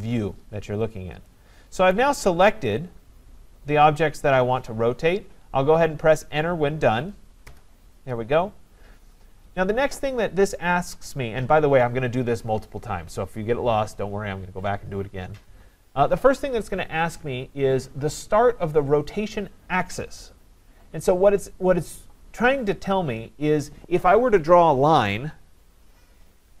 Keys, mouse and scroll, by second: 0.9 scroll, 1.9 right click, 2.2 scroll, 7.5 Return.